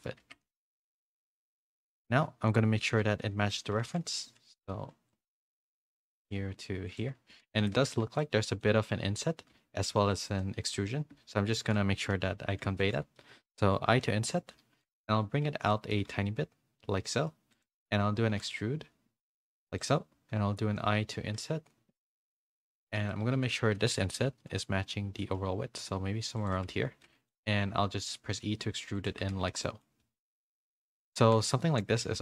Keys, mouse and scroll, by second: 0.2 Tab, 0.4 a, 0.6 s, 2.0 KP_1, 3.0 z, 3.7 g, 5.3 s, 6.0 g, 7.3 1, 7.6 a, 7.8 a, 8.0 b, 9.5 z, 10.4 middle click, 11.6 KP_3, 12.1 z, 12.8 shift+middle click, 13.9 i, 15.0 z, 15.8 middle click, 15.8 z, 16.0 g, 18.3 e, 23.3 i, 23.3 KP_3, 23.7 z, 25.2 z, 25.2 s, 26.7 z, 27.0 middle click, 27.6 e, 29.1 Tab, 29.3 a, 29.6 middle click, 29.6 a, 30.2 middle click, 31.2 a, 31.2 a, 31.6 shift+middle click, 32.0 a.